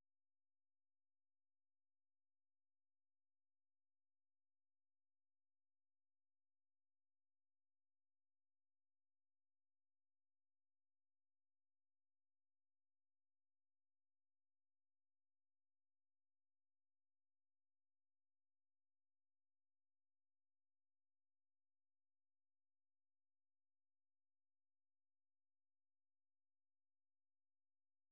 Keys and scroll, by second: 2.1 alt+Tab, 4.7 alt+Tab, 17.7 ctrl+t, 18.2-23.6 typing.